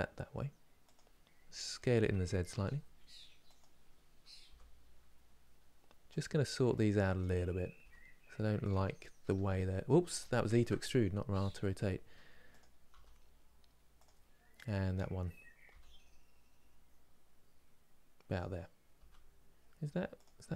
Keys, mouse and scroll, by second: 6.8 click, 7.5 g, 10.2 ctrl+z, 11.0 r, 15.4 g, 20.3 click, 20.4 g.